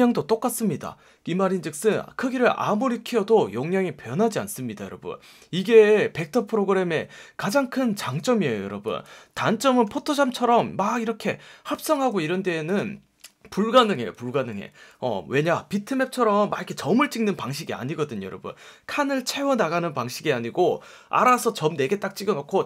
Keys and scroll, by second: 8.7 space, 9.8 F1, 11.9 F1.